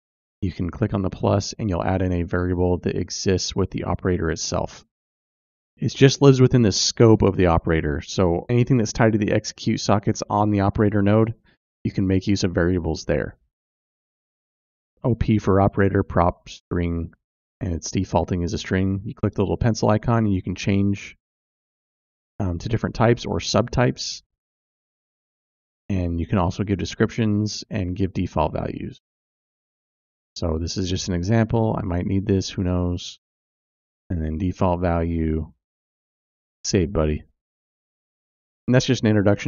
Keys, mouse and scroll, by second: 1.4 click, 4.3 click, 4.4-15.3 drag, 16.2-37.7 drag, 27.8 BackSpace, 29.7 e, 36.9 d.